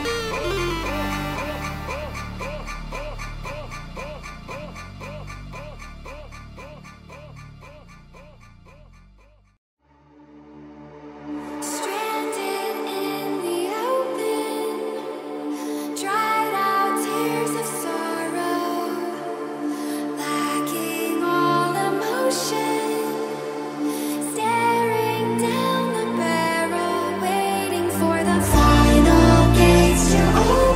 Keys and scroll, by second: 7.8 2, 8.8-12.7 typing.